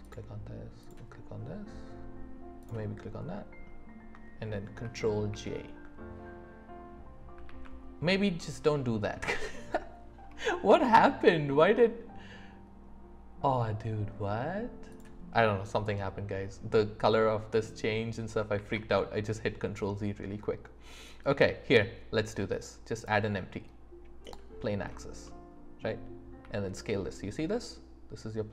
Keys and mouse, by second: 0.0 shift+click, 0.8 shift+click, 5.3 ctrl+j, 18.6 shift+a, 25.2 middle click, 26.4 s.